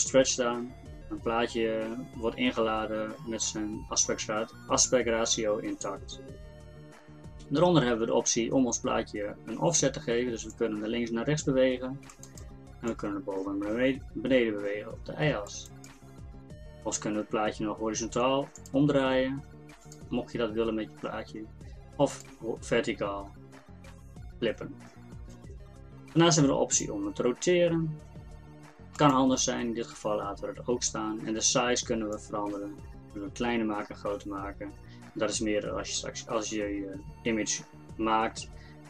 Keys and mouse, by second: 18.6-21.8 drag, 22.1-29.0 drag, 32.1-34.3 drag.